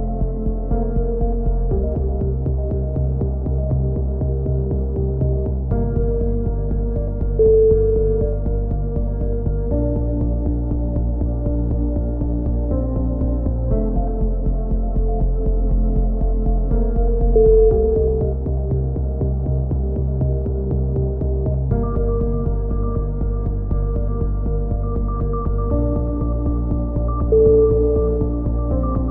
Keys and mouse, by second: 0.0 click, 1.7 c, 3.1-4.2 drag, 4.3 a, 4.7 z, 4.9-6.2 drag, 7.7 click, 8.1 right click, 8.6 middle click, 8.7 ctrl+KP_7, 9.6 e, 10.2 click, 11.9 click, 12.2 z, 12.6 c, 13.2-14.6 drag, 13.7 right click, 16.0 a, 16.1 z, 16.3 click, 17.7 click, 18.0 right click, 18.4 x, 19.3-21.0 right drag, 20.4 f, 21.6-24.2 right drag, 22.3 f, 23.7 f, 23.9 a, 24.4 KP_3, 24.6 z, 24.9-26.3 middle drag, 28.2-29.1 drag, 28.8 z.